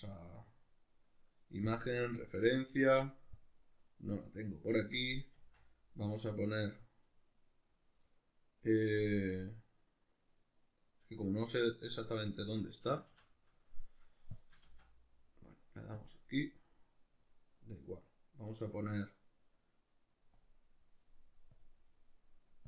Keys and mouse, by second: 5.4 shift+a, 12.9 Escape, 14.3 click, 14.7 shift+a.